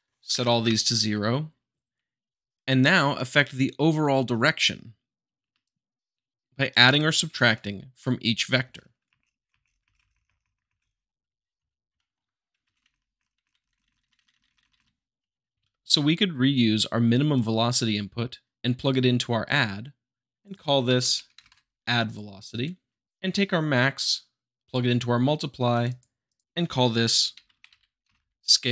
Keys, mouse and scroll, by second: 5.6 shift+click, 9.0 space, 9.8 Left, 11.3-11.8 middle drag, 11.9-12.6 shift+middle drag, 12.6 shift+Left, 12.8 Right, 14.3 Right, 15.5 `, 17.3-18.3 drag, 19.6-20.4 middle drag, 20.4 click, 20.8 a, 21.3 d, 22.0-23.2 drag, 25.7-26.8 drag, 27.3 shift+s, 27.7 a, 28.0 l, 28.1 e.